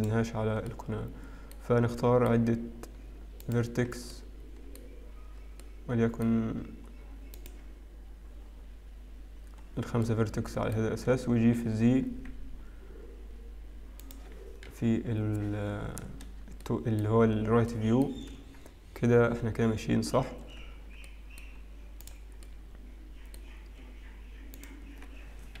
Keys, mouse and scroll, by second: 1.2 middle click, 2.0 shift+middle click, 3.6 shift+click, 4.1 shift+middle click, 7.7 shift+middle click, 7.7 shift+click, 9.4-10.9 scroll down 6, 10.9 middle click, 12.0 g, 14.7 KP_3, 16.2 scroll down 1, 16.6 shift+middle click, 17.7 shift+middle click, 19.9-20.8 scroll up 3, 20.8 z, 23.7 middle click, 23.7-25.6 scroll up 2.